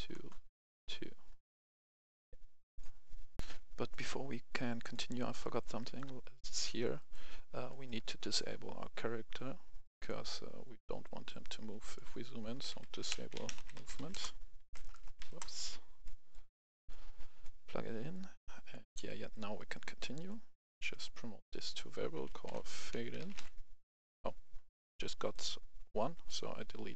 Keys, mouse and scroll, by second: 0.1 Return, 2.7 click, 3.4 F10, 4.8 click, 5.4-6.7 right drag, 6.7 scroll down 1, 6.9 right click, 7.3-7.7 scroll up 1, 7.7 right click, 9.8-12.4 drag, 12.6-15.2 typing, 14.1 Return, 15.3 Return, 16.0 click, 18.9 right click, 20.9 click, 22.4-22.9 typing, 25.3 click, 26.4 Delete.